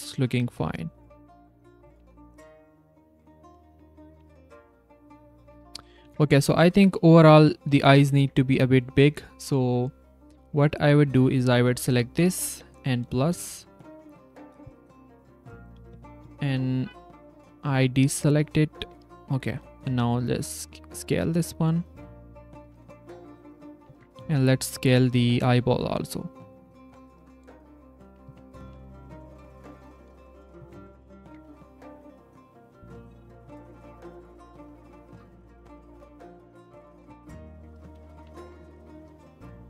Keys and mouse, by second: 0.3 click, 0.5-1.8 drag, 4.2 Tab, 6.5 s, 7.7 Tab, 8.0 click, 8.9 click, 10.1 click, 10.8 click, 13.4 ctrl+s, 13.9 click, 14.2 ctrl+a, 14.7 ctrl+c, 16.7 ctrl+c, 17.5 ctrl+c, 17.9 click, 19.8 s, 20.9 s, 22.6 Tab, 23.7 click, 24.6 s, 27.3 click, 27.8 click, 28.6 g, 29.6 click, 30.6 Tab, 31.6 click, 32.0 click, 32.9 c, 33.7 click, 34.8 click, 35.0 c, 35.6 click, 37.2 click, 38.4 Tab, 39.2 drag.